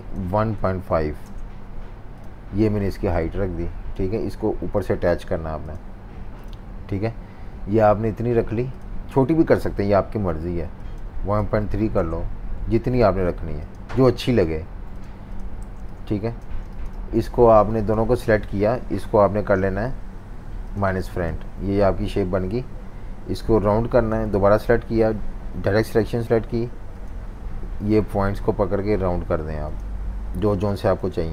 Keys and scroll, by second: 0.3-1.5 typing, 11.3-12.2 typing, 15.6-17.1 typing, 25.6 a.